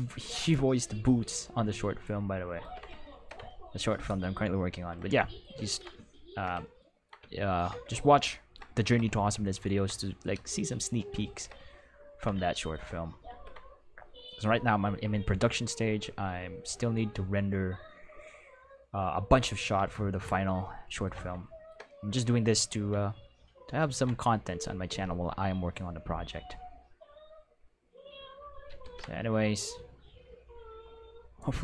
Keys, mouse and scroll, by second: 0.3 click, 2.6 ctrl+s, 4.7 ctrl+s, 5.6 ctrl+middle click, 6.0-6.4 shift+middle drag, 13.2 ctrl+s, 20.6 ctrl+middle click, 21.4 shift+middle click, 23.8 ctrl+s, 28.8 ctrl+s, 29.6-31.3 drag.